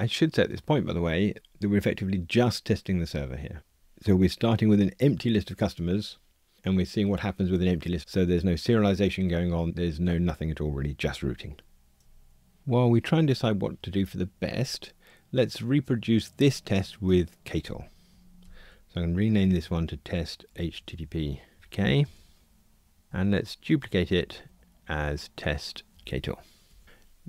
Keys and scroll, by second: 18.4 shift+F6, 23.1 alt+Up, 23.8 super+d, 26.0 alt+shift+Left.